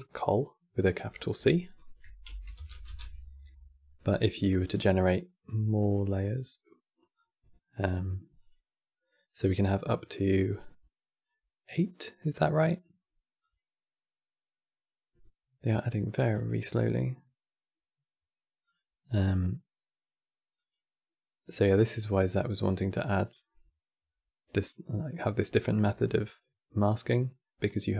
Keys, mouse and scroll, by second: 0.8-3.8 drag, 4.0-6.1 drag, 6.9-11.1 drag, 13.1-23.5 drag.